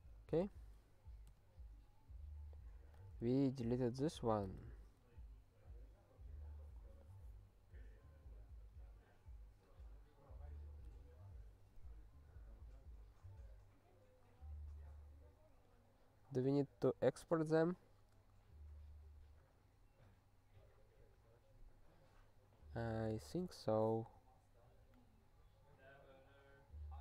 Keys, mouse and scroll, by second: 0.4 super+w, 1.3 g, 2.9 click, 3.4 s, 3.9 ctrl+p, 4.2 ctrl+p, 4.4 Tab, 5.1-5.5 scroll down 1, 7.9-8.5 scroll down 3, 10.2 scroll down 1, 15.7 scroll up 3, 16.4-27.0 scroll up 2.